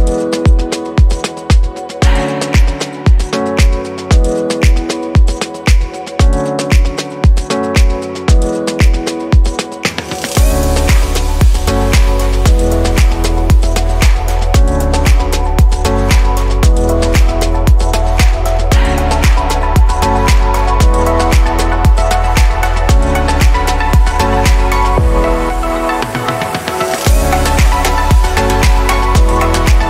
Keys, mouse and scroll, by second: 1.5 click, 1.8-2.1 scroll down 3, 2.3-5.6 middle drag, 5.6 scroll up 2, 6.3-7.3 middle drag, 7.3 click, 9.4 click, 11.0-13.1 middle drag, 13.1 scroll down 2, 13.8-16.9 middle drag, 16.9 click, 19.9-21.1 drag, 25.7 click, 26.2-27.1 scroll up 1.